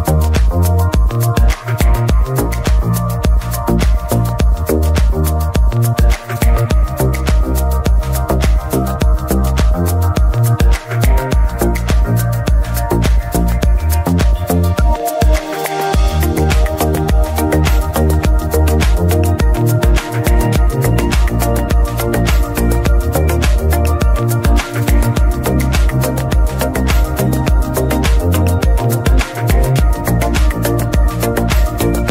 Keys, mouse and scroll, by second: 1.7 ctrl+shift+click, 2.4-3.2 scroll up 2, 3.2-3.9 scroll up 1, 3.9-4.2 scroll up 1, 4.2 scroll down 2, 4.4-5.3 middle drag, 5.3 ctrl+s, 8.2 ctrl+shift+click, 9.0-10.4 middle drag, 10.4-11.2 scroll up 2, 11.2 scroll up 1, 11.4-13.6 drag, 13.6 scroll up 1, 15.9 ctrl+z, 15.9-16.4 middle drag, 16.4 ctrl+shift+click, 18.1-19.9 middle drag, 19.9 ctrl+shift+click, 22.0-23.5 middle drag, 23.5 alt+click, 24.2 x, 24.5-25.2 scroll down 2, 25.2-27.2 scroll down 1, 27.2 scroll down 1, 27.3 ctrl+shift+click, 28.9 middle click, 29.1-30.2 scroll up 2, 30.2 middle click, 30.7-31.1 scroll up 2, 31.1 scroll down 2, 31.3-32.1 middle drag.